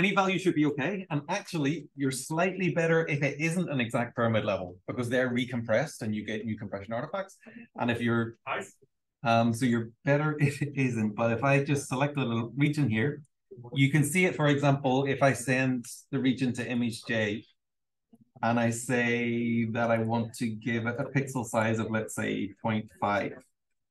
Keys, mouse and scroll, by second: 10.7-11.9 scroll up 1, 11.9 scroll up 1, 12.0 click, 12.5 r, 12.6-13.6 drag, 14.4 click, 16.5 click, 19.9 click, 20.9 click, 21.6 click, 23.1 5.